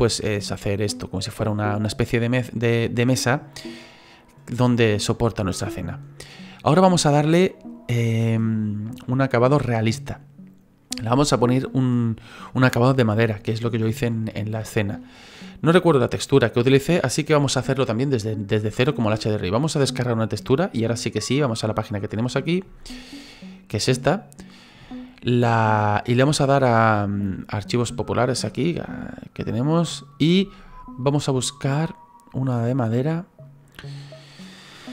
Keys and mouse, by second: 0.9 middle click, 20.5 click, 21.4 click.